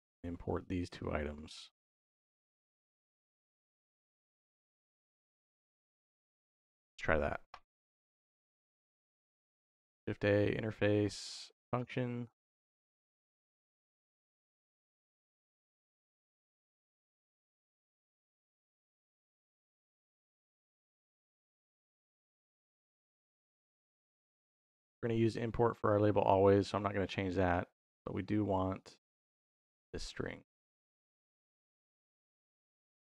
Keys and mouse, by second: 1.2-3.8 drag, 4.0 click, 5.0 shift+a, 6.2 BackSpace, 9.5 shift+a, 17.0-18.0 drag, 18.5-21.1 drag, 22.1-24.4 drag, 28.1-29.6 drag, 32.0 click.